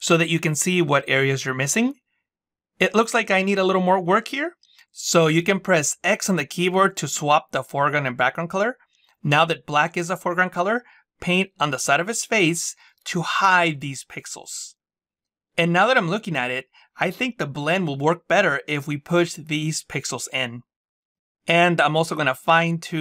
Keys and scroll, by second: 6.1 x.